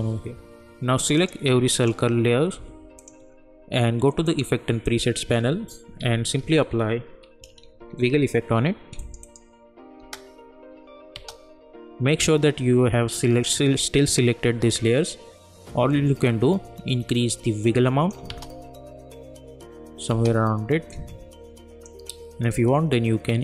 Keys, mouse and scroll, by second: 1.7 shift+click, 4.2 click, 5.4 w, 6.0 ctrl+a, 6.4-8.3 typing, 9.0 click, 10.0 space, 16.2-18.3 drag, 18.3 space, 20.9-23.4 drag.